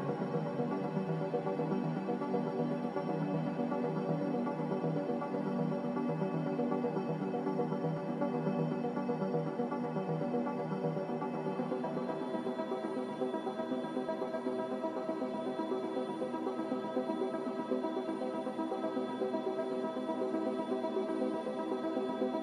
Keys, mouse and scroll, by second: 3.7 a, 7.6 z, 15.4-16.2 typing.